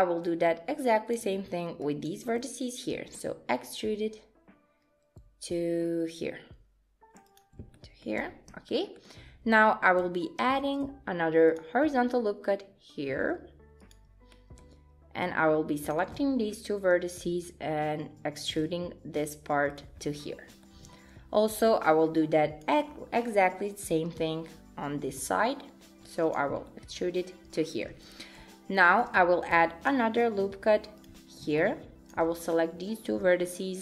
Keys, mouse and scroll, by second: 0.3 click, 1.8 shift+click, 3.0 e, 7.7 shift+middle click, 10.6 ctrl+r, 14.3 shift+middle click, 15.2 click, 17.2 e, 20.6 shift+middle click, 21.7 click, 23.9 e, 26.7 shift+middle click, 27.6 shift+middle click, 27.6-27.9 shift+scroll up 1, 28.9 ctrl+r, 31.6 click, 33.3 e.